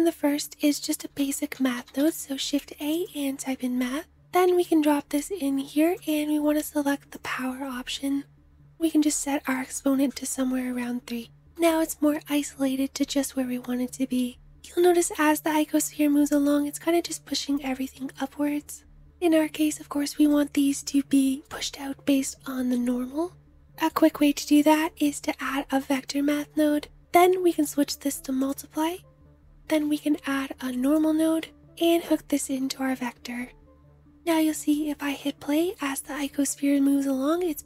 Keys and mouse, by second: 5.9-20.0 middle drag, 11.6 space, 17.2 space, 21.1-23.4 middle drag, 27.1-29.3 middle drag, 29.3-31.8 drag, 32.4 middle click, 33.9 space, 34.1-36.0 middle drag, 36.5-37.6 middle drag.